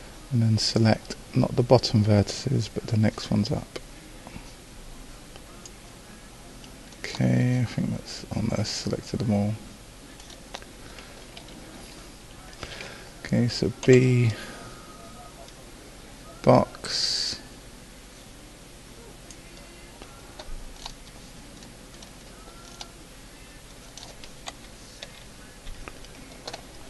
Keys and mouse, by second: 11.4 a, 13.9 b, 20.9-23.3 drag, 24.4 click, 24.5 KP_2, 25.0 KP_3.